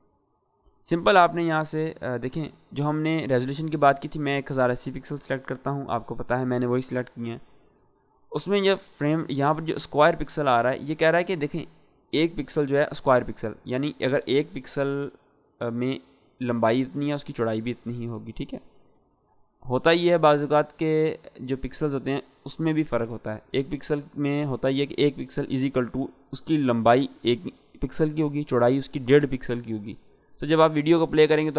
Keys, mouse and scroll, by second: 2.0 click, 8.9 click.